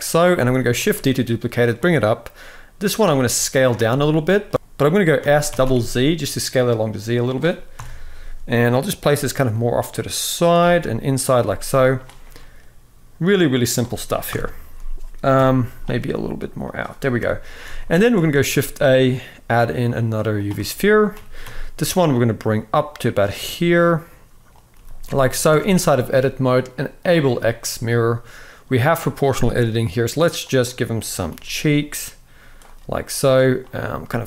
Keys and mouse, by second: 0.1 shift+middle drag, 0.5 shift+d, 2.7 s, 3.5-4.1 middle drag, 4.5 s, 4.9 s, 7.4 KP_7, 8.8 g, 10.3 r, 11.1 g, 12.1-14.0 middle drag, 14.0 KP_1, 15.0 KP_7, 15.7 r, 16.9 KP_1, 17.4 alt+a, 17.7 shift+middle click, 18.0 shift+a, 20.4 shift+middle drag, 20.8 g, 23.2 s, 24.5 g, 25.2 Tab, 26.7 click, 27.2 shift+middle click, 30.3 click, 31.0 g, 33.3 click, 33.7 g.